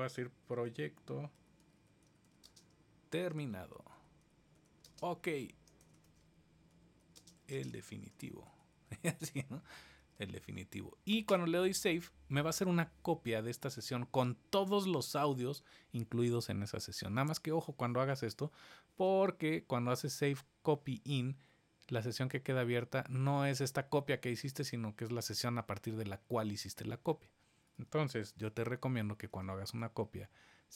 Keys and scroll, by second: 28.2 super+s.